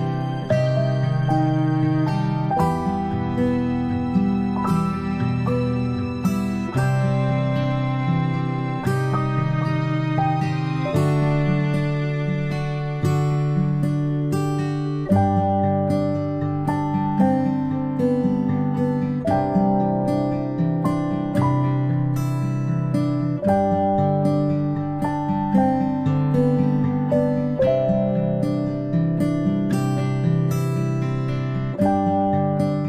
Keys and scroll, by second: 0.1-2.0 space, 8.8 ctrl+z, 14.2 ctrl+z.